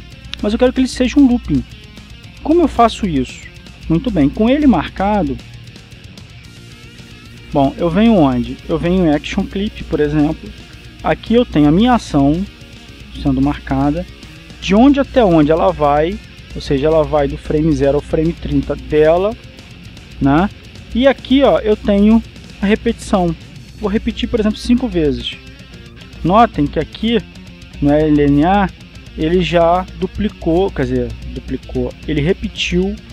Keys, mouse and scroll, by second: 6.8 click, 9.3 click, 24.6 click, 25.9 KP_5, 26.3 KP_Enter, 28.1-29.1 shift+middle drag, 29.0 shift+click.